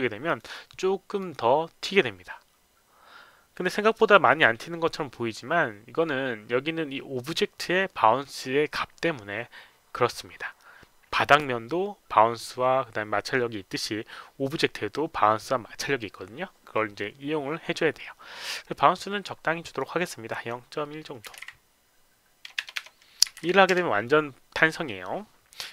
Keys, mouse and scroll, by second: 0.3 click, 0.5 click, 1.2 click, 4.3 click, 18.8-19.8 drag, 20.3 click, 21.2 KP_Decimal, 21.4 KP_1, 23.3 KP_Decimal, 23.4 KP_1.